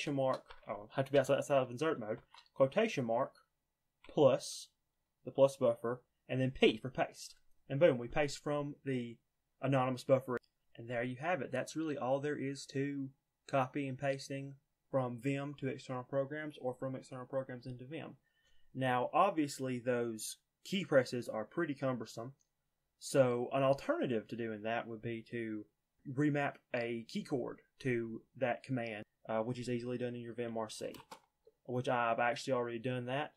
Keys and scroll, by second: 1.0 Escape, 2.0 typing, 6.5 p, 30.4-31.2 typing.